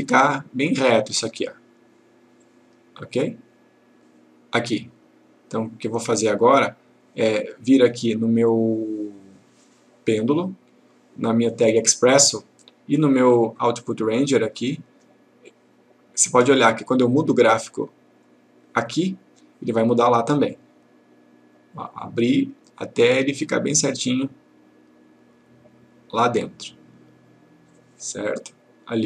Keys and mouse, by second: 2.5 click, 6.0-7.5 click, 10.3 click, 13.8 click, 15.6-16.8 click, 20.8 click.